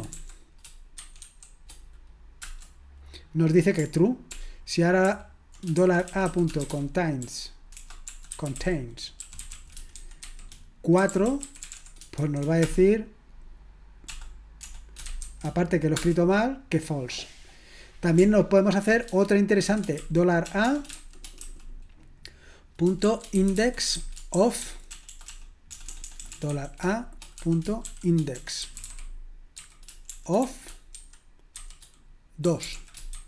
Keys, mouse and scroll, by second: 0.0-1.2 typing, 2.4 Return, 4.3 ctrl+p, 5.1 ctrl+w, 5.6-12.7 typing, 14.6-15.2 typing, 16.0 Return, 23.6-25.7 typing, 27.1-33.2 typing.